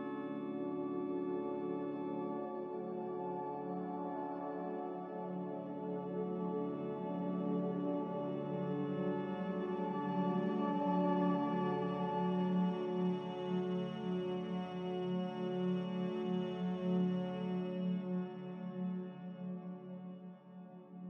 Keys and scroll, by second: 3.8 g, 6.9 Escape, 7.0 Escape, 7.7 Escape, 14.2 g, 17.4 typing, 17.9 Return.